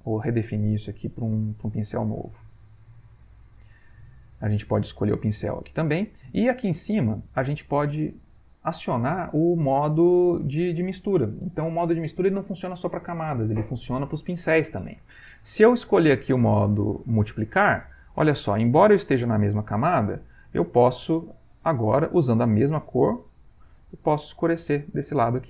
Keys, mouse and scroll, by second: 4.1 click, 4.7 click, 5.7 click, 15.5-17.9 drag, 20.5-22.3 shift+drag, 23.4 ctrl+click, 24.0 ctrl+click, 24.6 click, 25.2 shift+click.